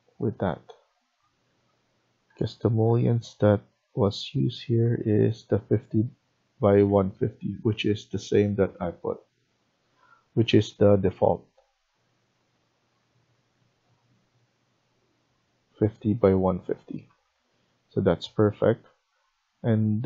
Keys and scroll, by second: 1.3 Escape, 2.2 Tab, 2.7 Tab, 3.3 Tab, 6.7 Escape, 7.4 Escape, 9.3 Tab, 9.9 Tab, 10.3 Tab, 10.7 Tab, 11.5 Tab, 12.0 Tab, 12.4 Tab, 17.0 Escape, 17.3 Escape.